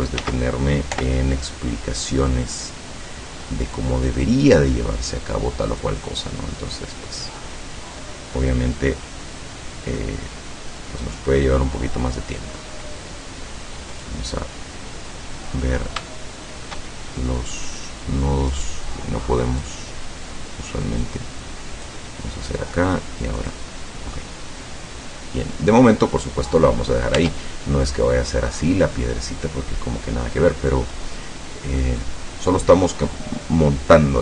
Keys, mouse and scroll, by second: 0.2 ctrl+z, 0.9 o, 1.5-2.5 drag, 2.5-2.9 scroll up 1, 3.0-3.9 scroll up 2, 4.1-4.4 scroll up 1, 6.6-7.4 middle drag, 7.5-7.9 scroll up 2, 8.0 middle click, 14.0 click, 16.0 shift+middle click, 17.0 shift+middle click, 18.5 right click, 19.7-22.1 drag, 23.4 click, 24.2-26.0 middle drag, 26.1-26.5 scroll up 1, 27.2 Tab, 27.5 scroll down 1, 27.9-30.9 middle drag, 31.4 scroll down 2, 32.0 click.